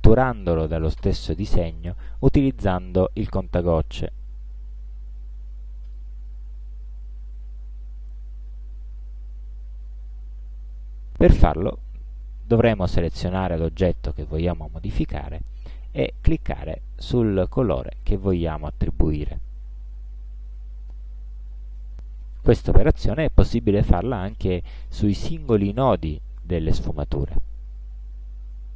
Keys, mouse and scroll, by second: 5.9 click, 12.7 click, 14.8 space, 15.4 click, 17.8 space, 18.2 click, 19.0 click, 21.0 click, 23.0 click.